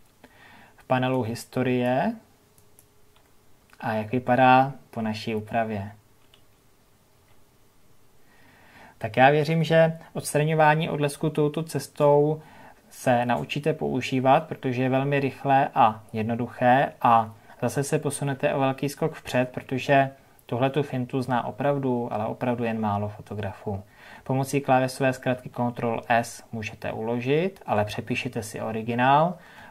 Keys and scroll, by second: 5.1 ctrl+z.